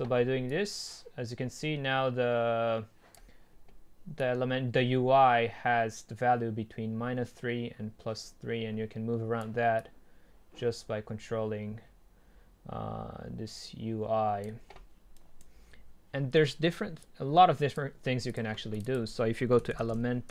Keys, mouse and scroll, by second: 13.6-15.2 drag, 15.2-17.0 right drag, 17.0-20.3 drag.